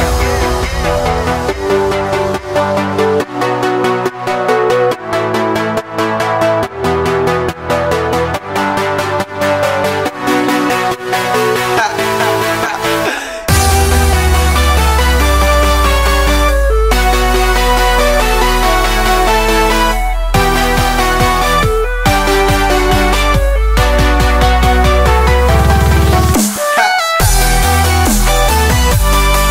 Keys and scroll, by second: 0.9 space, 1.4 space, 1.5 space, 1.6 space, 3.3 space, 3.8 space, 3.9 space, 4.9 space, 5.5 alt+super+space, 5.5 alt+super+space, 5.6 alt+super+space, 5.7 alt+super+space, 5.8 alt+super+space, 6.0 alt+super+space, 6.0-7.8 typing, 6.9 super+space, 7.0 super+space, 8.0 super+space, 11.0 space, 11.5 space, 12.3 shift+super+g, 12.5 shift+super+g, 13.3 alt+shift+super+d, 24.5 super+d, 24.8 super+d, 25.0 super+d, 25.2 super+d, 27.3 super+g.